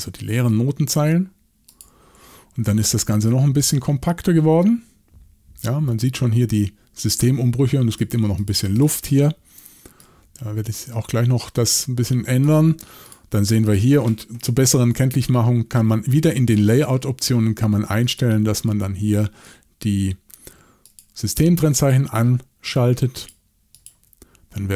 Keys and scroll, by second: 14.7 shift+super+l.